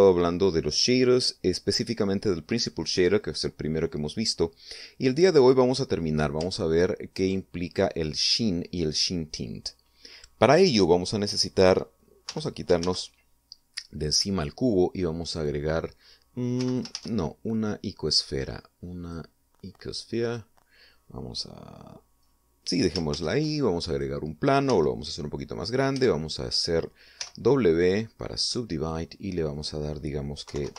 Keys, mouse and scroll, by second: 7.4 ctrl+click, 13.2 x, 13.3 click, 13.7 shift+a, 16.2 click, 17.4 x, 17.6 shift+click, 17.8 shift+a, 19.9 click, 21.1 click, 23.1 scroll up 2, 24.0 shift+a, 24.8 click, 25.6 s, 26.5 click, 26.8 Tab, 28.1 w, 29.3 click, 30.4 click.